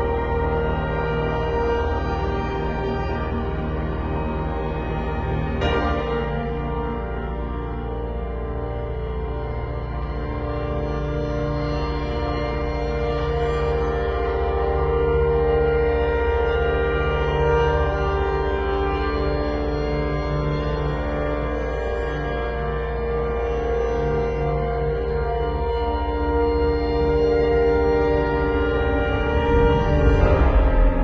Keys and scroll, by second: 0.4 [, 2.1 ], 3.2 [, 5.5 ], 8.9 [, 12.2 ], 14.6 v, 16.7 super+z, 18.2 super+t, 24.5 z, 25.0 space, 26.6 b, 30.1 [.